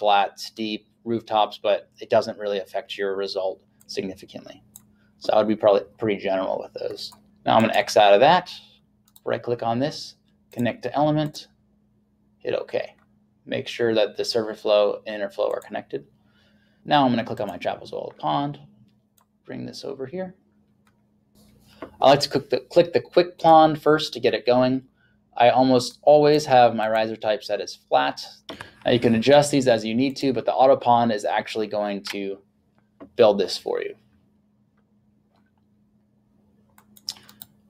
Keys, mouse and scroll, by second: 3.8 click, 7.3 click, 7.6 click, 9.1 right click, 10.6 click, 15.6 click, 23.4 click, 25.9 click, 30.2 click, 36.8 click, 37.3 right click.